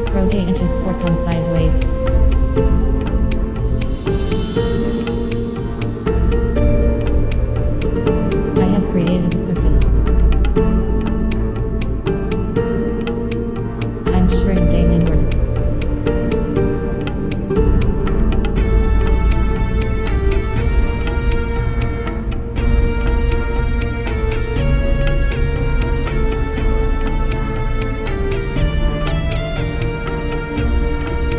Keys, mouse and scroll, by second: 1.2 Return, 6.3 Tab, 8.0 f, 9.1 KP_7, 13.6 i, 15.9 click, 16.9 Return, 17.8 BackSpace, 18.0 BackSpace, 19.7-21.3 middle drag, 25.0 click, 26.3 a, 28.7 right click, 29.3 KP_1, 30.4 e, 31.2 g.